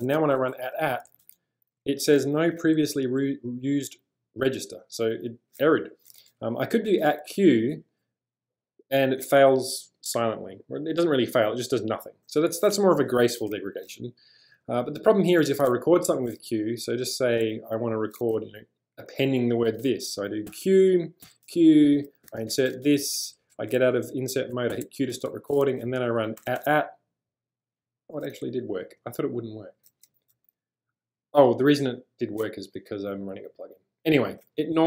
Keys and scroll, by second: 1.1 @, 1.2 @, 6.9 @, 7.2 q, 20.5-23.0 typing, 23.6 Escape, 24.7 q, 26.4 shift+2, 26.6 shift+2, 27.7 typing, 28.9 u, 30.3 l.